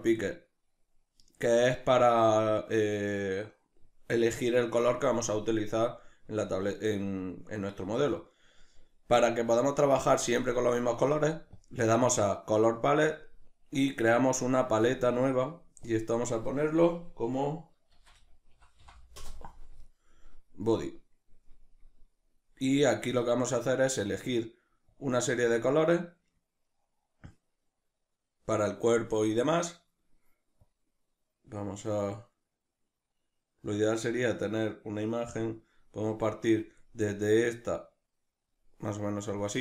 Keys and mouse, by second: 19.2 Return, 19.2-39.6 drag.